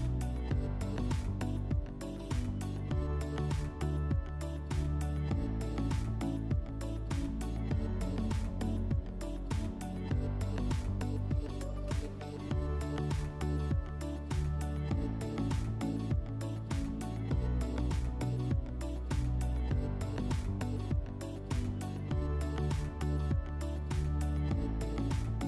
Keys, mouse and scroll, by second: 0.2-1.7 drag, 7.1-8.6 drag, 8.7 w, 11.8 click, 13.1 middle click, 14.4 click, 16.8 click, 19.2 click, 23.0 click.